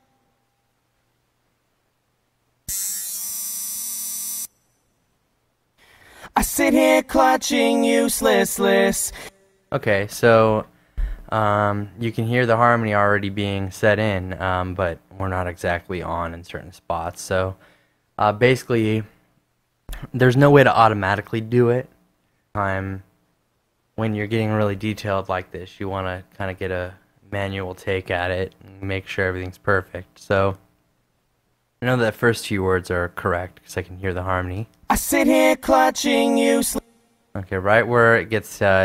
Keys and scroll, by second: 0.2 super+space, 0.4 z, 1.3 a, 4.8 space, 9.0 space, 35.0 space.